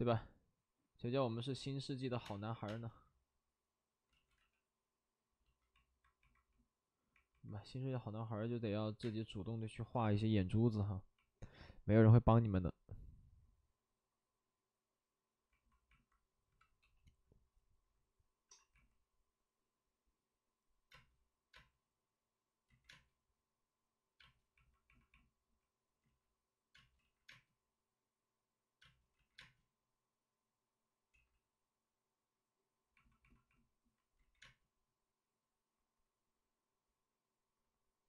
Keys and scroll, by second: 2.1 3, 2.2 space, 2.6 space, 4.0 ctrl+z, 4.3 x, 9.0 space, 9.7 b, 10.1 p, 14.7 p, 16.5-17.2 typing, 18.4 c, 20.9 space, 21.5 space, 22.6 ctrl+z, 22.8 space, 24.1 space, 26.0 ctrl+z, 26.7 space, 26.9 ctrl+z, 27.2 space, 29.1 ctrl+z, 29.3 space, 31.1 ctrl+z, 34.1 ctrl+z, 34.4 space.